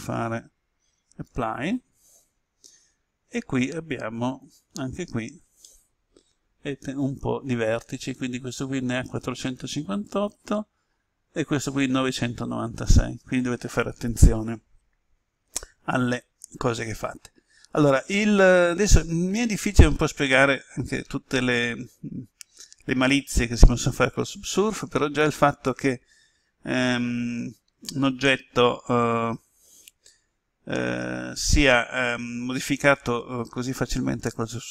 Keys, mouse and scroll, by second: 1.2 click, 4.2 Tab, 5.5-9.1 middle drag, 9.1 Tab, 10.0 right click, 16.1-17.5 middle drag, 17.7-18.9 scroll down 1, 20.2-22.5 middle drag, 27.0-27.3 scroll down 1.